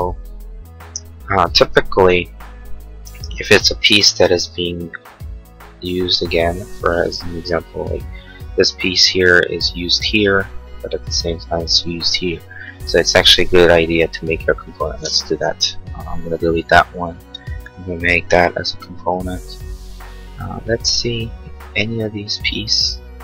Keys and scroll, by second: 15.6 Delete.